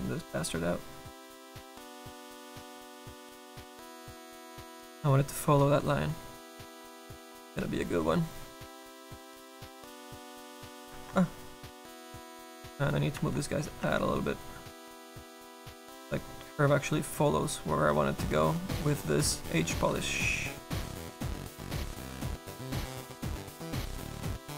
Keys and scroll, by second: 13.2 s, 13.8 s, 24.1 s.